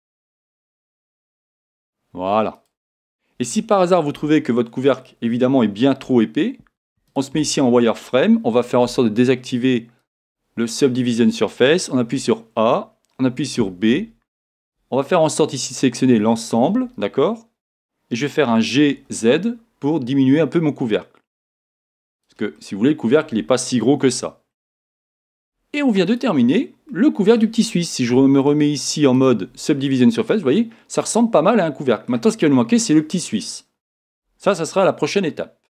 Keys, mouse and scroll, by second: 2.6 click, 3.0-4.1 scroll down 1, 4.1 KP_1, 6.0 z, 10.0 click, 12.0 a, 13.3 b, 18.4 g, 22.2 click, 22.5-29.2 middle drag, 24.1 Tab, 24.5-25.3 scroll down 2, 25.3 z, 26.5-26.9 scroll down 2, 29.2 click, 29.9-35.8 middle drag, 32.4-35.8 scroll up 2.